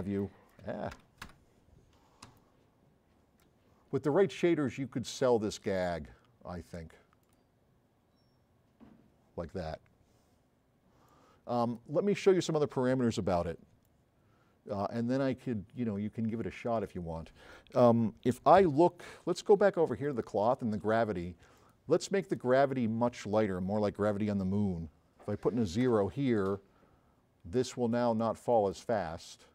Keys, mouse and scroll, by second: 0.2 right click, 1.0 Escape, 2.3 s, 2.4-3.4 right drag, 4.8 scroll up 2, 7.2 click, 11.1-11.4 drag, 11.9 click, 13.5 s, 13.9 right click, 16.3 right click, 19.9 click, 20.1 click, 20.5 click, 20.9 click, 24.2 Left, 25.9 KP_0.